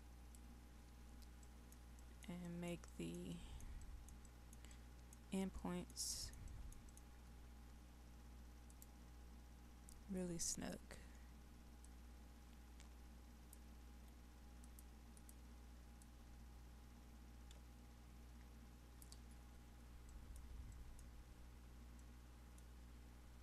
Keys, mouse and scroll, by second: 1.5-6.6 middle drag, 8.7 click, 11.8 shift+click, 14.7-19.1 drag, 20.2 middle click, 21.3-21.9 scroll up 1, 21.9 middle click.